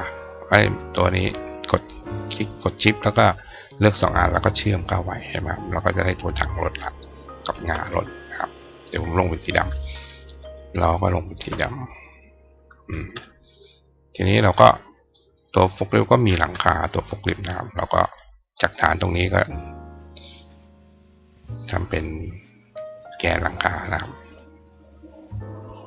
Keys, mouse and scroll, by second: 4.2 click, 4.7 click, 7.4 shift+click, 9.3 click, 9.7 click, 10.3 click, 11.1 shift+click, 12.3 click, 12.6 click, 14.0 click, 14.3 right click, 15.3 click, 19.8 click, 20.7-22.9 drag, 23.6 click, 24.6-25.8 drag.